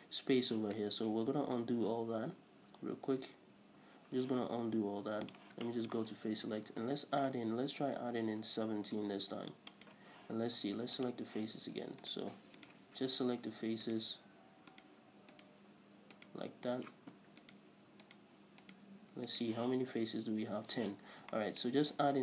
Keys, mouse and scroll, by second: 1.0 ctrl+z, 5.5 drag, 5.8-10.0 shift+middle drag, 6.6 ctrl+r, 10.0 right click, 12.2 right click, 12.7 shift+right click, 14.0 shift+right click, 14.9 shift+right click, 15.5 shift+right click, 16.4 shift+right click, 17.6 shift+right click, 18.2 shift+right click, 18.8 shift+right click, 19.5 shift+right click, 21.2 scroll down 1, 21.5-22.2 shift+middle drag.